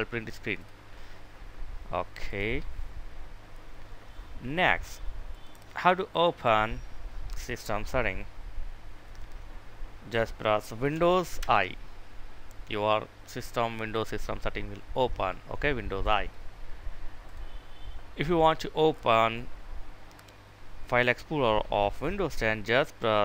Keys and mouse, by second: 10.9 super+i, 15.6 click.